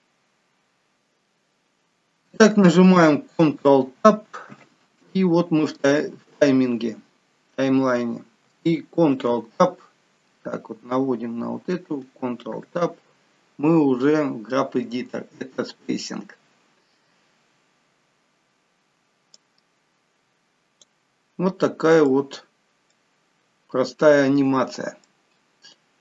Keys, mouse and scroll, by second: 0.9 shift+middle click, 4.5 ctrl+Tab, 9.2 ctrl+Tab, 19.7 click, 21.4-22.0 scroll up 2, 22.0 middle click, 22.5-22.8 scroll down 1, 22.8 middle click.